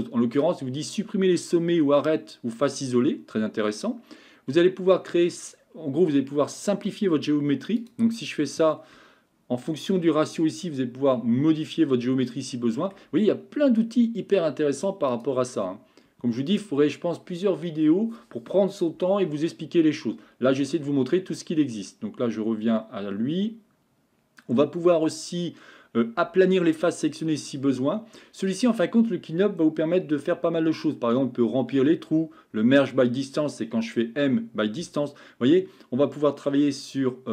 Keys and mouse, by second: 11.8-12.9 middle drag, 15.2-37.3 drag.